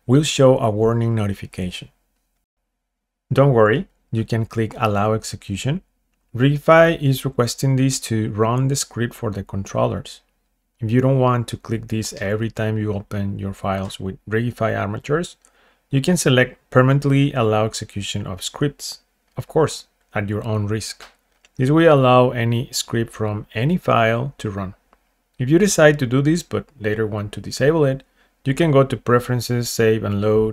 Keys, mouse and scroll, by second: 21.4 click, 22.5 click, 29.8 click.